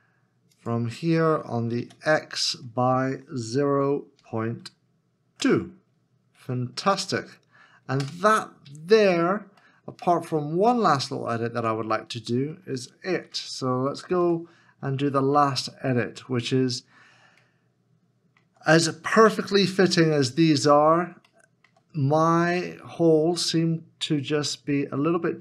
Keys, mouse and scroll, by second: 1.8 x, 3.5 0, 4.2 ., 5.3 2, 8.0 Return, 9.0 Tab, 9.6 middle click, 14.2 1, 16.1 Tab, 16.8 scroll up 1, 17.6 shift+middle click, 22.3 shift+scroll up 1, 22.9 shift+scroll up 1, 23.2-23.8 shift+scroll down 1.